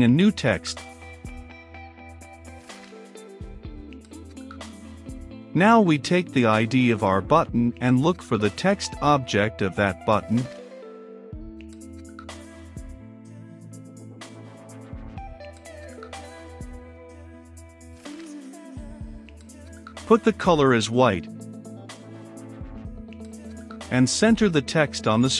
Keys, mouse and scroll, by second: 0.0 click, 0.7-2.4 typing, 3.6-6.2 drag, 6.2 right click, 7.1-9.2 drag, 9.2 Return, 9.6 ctrl+v, 10.6 >, 10.9 t, 11.0 e, 11.1 x, 11.6 Return, 12.8-18.8 drag, 18.8 Return, 19.1-21.1 typing, 19.7 Return, 21.8 click, 21.9 ctrl+s, 22.5-25.3 drag.